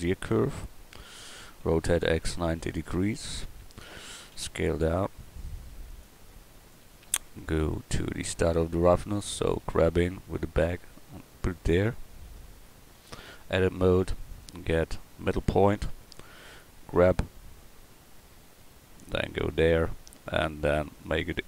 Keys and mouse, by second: 1.6 r, 4.3 s, 6.4 middle click, 9.6 g, 13.5 Tab, 17.0 g, 20.4-21.4 drag.